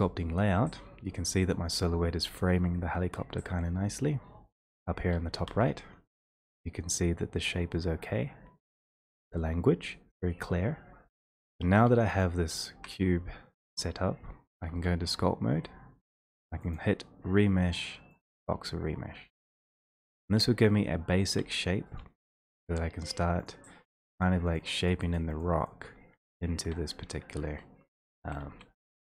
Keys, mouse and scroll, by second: 5.5 ctrl+space, 11.8 1, 12.2 click, 12.8 i, 14.7 3, 16.7 click, 20.8 x, 21.3 x, 21.4 x, 23.5 click, 24.2 click, 24.5 click, 24.9 click, 25.2 click, 25.4 click, 25.7 click, 26.2 x, 27.3-28.4 c, 28.5 v.